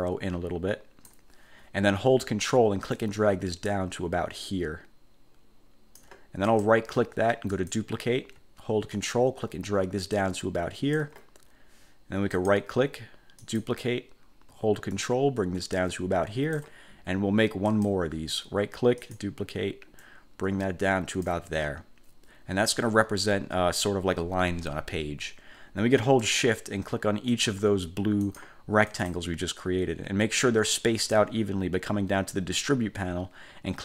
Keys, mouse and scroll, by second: 3.0 ctrl+click, 6.6 ctrl+click, 7.6 click, 9.1-11.3 ctrl+drag, 12.5 click, 13.6 click, 15.1-16.9 ctrl+drag, 17.8 click, 19.1 click, 20.2-21.6 ctrl+drag, 27.4 shift+click, 28.4 shift+click, 29.0 shift+click.